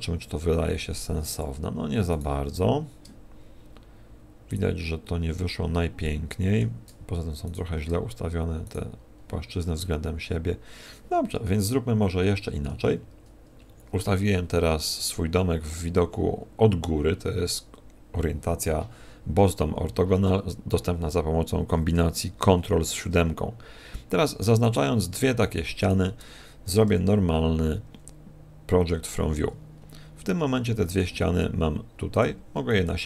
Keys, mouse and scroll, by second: 1.5 click, 2.1 right click, 4.5 shift+right click, 6.0 shift+middle click, 7.5 right click, 8.7 shift+right click, 11.5 KP_1, 12.2 KP_7, 12.8 ctrl+KP_7, 24.6 right click, 25.8 shift+right click, 26.8 u, 31.0 g, 32.5 click, 32.5 a.